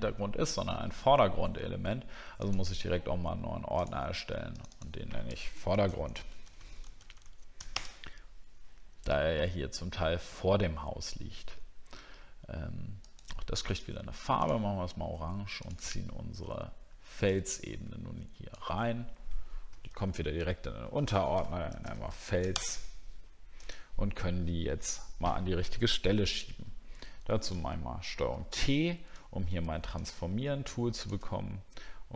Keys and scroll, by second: 19.9 ctrl+g, 26.9 shift+f, 27.6 ctrl+t, 29.2 alt+scroll down 1.